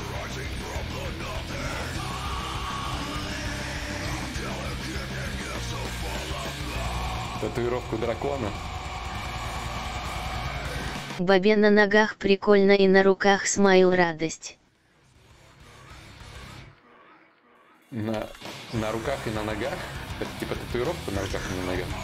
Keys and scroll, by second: 8.8 ctrl+z, 20.9 ctrl+z, 20.9 /.